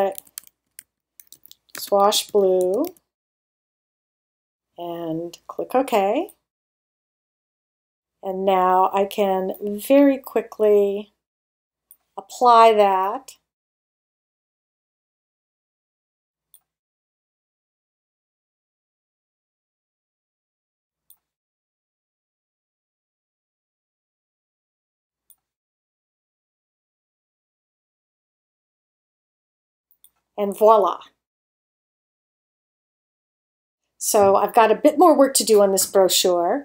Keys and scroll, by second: 0.0-3.4 typing.